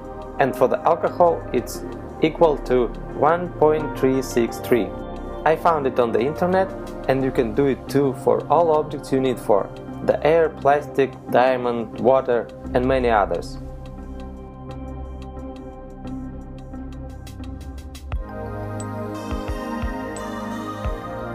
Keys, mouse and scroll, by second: 4.0 click, 8.6 click.